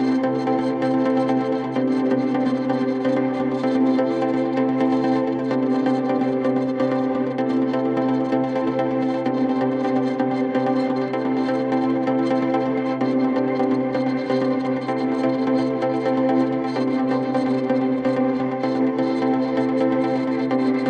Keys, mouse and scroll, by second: 0.6 scroll down 1, 0.9 middle click, 1.2-2.4 scroll up 18, 2.0 middle click, 2.6 double click, 3.1 double click, 4.1 b, 4.5-4.9 scroll down 14, 5.3 middle click, 5.8 space, 6.2-7.2 scroll down 8, 7.4 ctrl+z, 8.0 scroll down 4, 8.3 middle click, 8.7 scroll down 1, 9.0 scroll up 1, 10.2 scroll up 5.